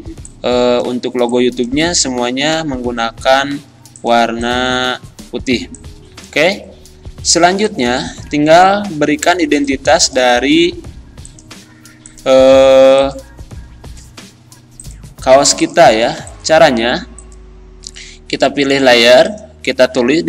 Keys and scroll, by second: 2.7 ctrl+g, 9.6 z.